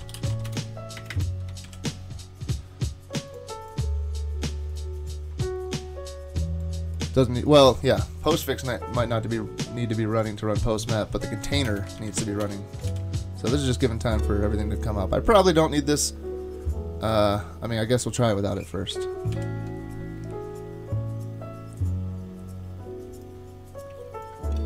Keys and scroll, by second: 0.0-1.1 typing, 1.7 super+s, 11.7 Return, 12.0 shift+super+Left, 12.4 BackSpace, 12.9 super+s, 18.9 super+/, 19.3 super+s.